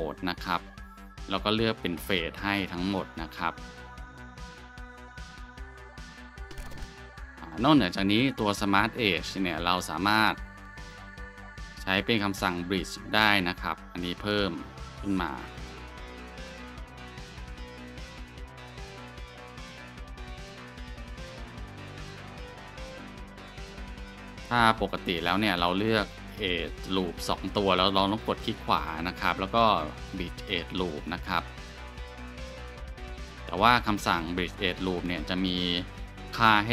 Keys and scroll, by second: 10.1 Tab, 13.5 2, 24.5 ctrl+z.